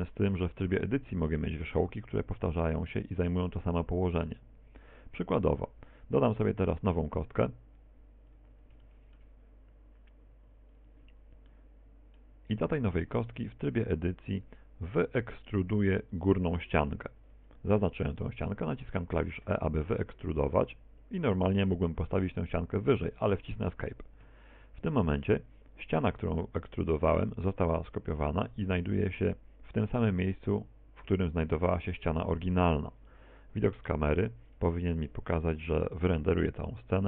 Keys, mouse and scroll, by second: 11.5 middle click, 12.6-13.1 scroll up 2, 13.1 Tab, 13.9 right click, 14.4 shift+right click, 15.1 right click, 15.8 shift+right click, 16.1 shift+right click, 19.4 e, 33.6 KP_0, 34.6 Tab.